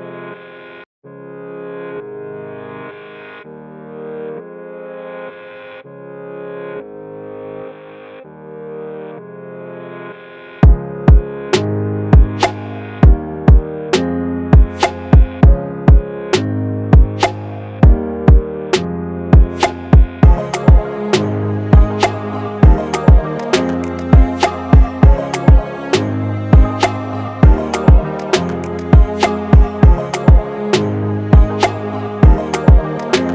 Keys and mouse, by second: 0.4 click, 0.9 right click, 1.5 click, 4.4 click, 7.2-11.0 drag, 11.0 click, 13.9 ctrl+z, 14.6 click, 15.5 shift+click, 15.8 right click, 17.3-21.3 drag, 22.0 shift+Num_Lock, 22.0 click, 22.8 shift+click, 23.3 i, 23.5 click, 26.1 click, 26.2 click, 29.3 click, 31.7 click.